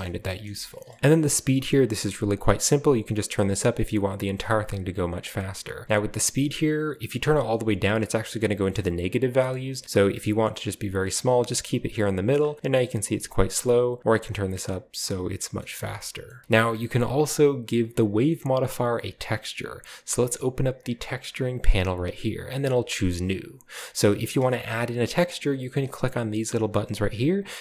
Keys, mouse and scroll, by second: 0.6-1.0 shift+middle drag, 1.0-2.1 drag, 1.0 space, 2.3 click, 3.4 click, 4.4 click, 5.3 click, 5.8 click, 6.2-8.3 drag, 9.3-10.9 drag, 12.7-13.6 scroll up 1, 12.7 middle click, 13.6-15.5 drag, 15.5-15.9 shift+middle drag, 16.2 shift+middle click, 16.4 b, 19.0 scroll down 2, 21.0 click, 21.6-22.5 scroll down 1, 21.8-24.5 drag, 22.8-24.5 scroll down 1, 24.5 space, 27.3-27.6 drag.